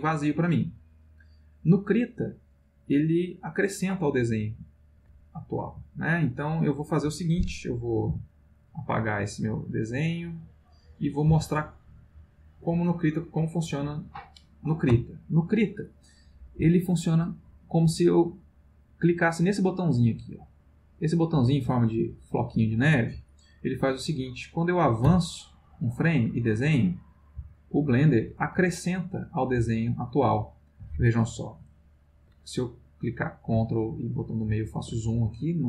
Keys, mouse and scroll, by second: 5.6 Delete, 8.1 x, 8.5 click, 9.6 click, 11.3 x, 11.5 click, 12.4-13.8 drag, 21.7 click, 25.0 Right, 26.2 click, 27.4 Right, 27.8 click, 28.5 Right, 28.9 click, 29.6 Right, 29.8 click, 31.1 middle click, 31.7-32.9 ctrl+middle drag, 33.1 ctrl+middle click, 33.7-35.0 ctrl+middle drag.